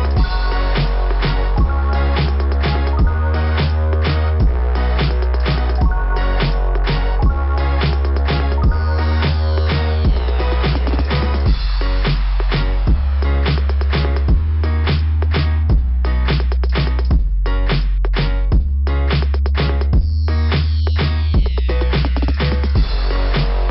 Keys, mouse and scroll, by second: 0.6 click, 1.5 scroll down 1, 1.5 ,, 2.6 scroll down 1, 6.1 right click, 6.3 right click, 6.4 right click, 7.7 click, 7.8 click, 8.6 click, 8.7 click, 9.7 click, 11.1 right click, 12.5 click, 15.1 click, 15.4 click, 15.6 click, 17.9 click, 18.5 click, 23.1 click.